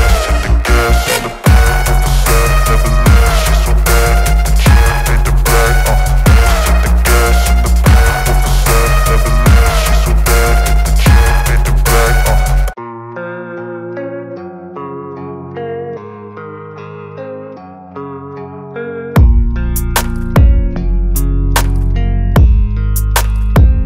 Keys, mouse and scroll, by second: 0.3-2.5 typing, 3.3 Return, 6.6 Return, 8.1 click, 9.8-18.3 typing, 19.4 ctrl+a, 21.7 click.